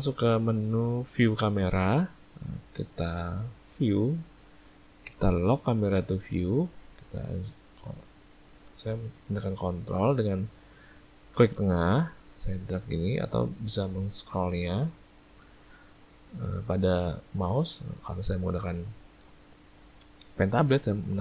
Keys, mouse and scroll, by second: 3.8 click, 6.3 click, 11.5 ctrl+middle click, 14.6-14.9 scroll up 2, 14.9 scroll down 2, 15.6-16.0 scroll down 1, 17.1 shift+middle click.